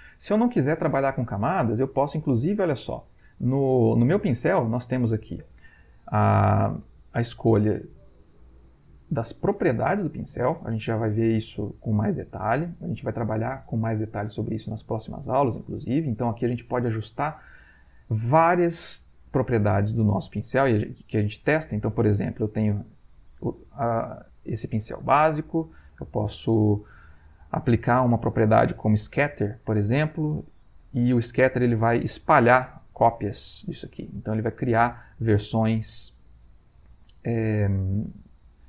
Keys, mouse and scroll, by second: 8.3 click, 15.4 click, 15.9 click, 21.1-24.9 drag, 25.9 click, 28.9 click, 32.0-34.2 drag, 34.7 click, 38.0-38.6 drag.